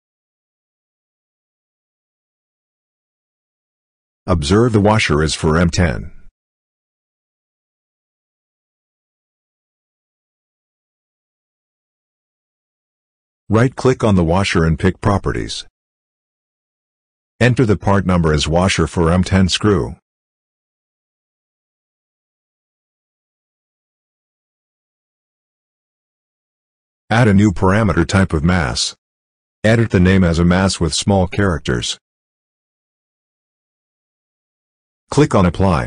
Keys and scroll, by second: 10.2 Escape, 19.4-23.4 typing, 30.7 m, 31.2 a.